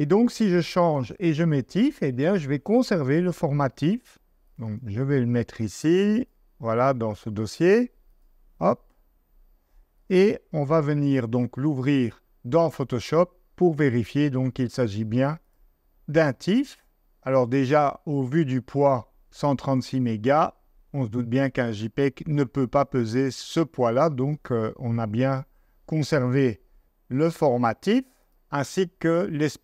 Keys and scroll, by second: 12.2 super+Tab.